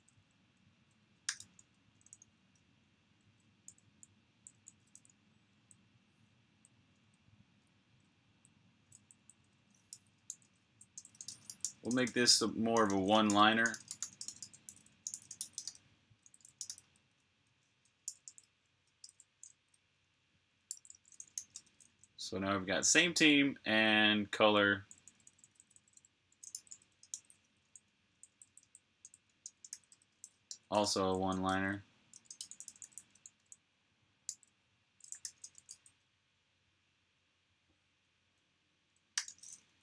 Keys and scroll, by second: 0.0-1.2 typing, 3.3-8.2 typing, 9.7-15.7 typing, 23.4-24.8 typing, 26.4-29.7 typing, 37.5-39.1 typing, 39.5 super+[.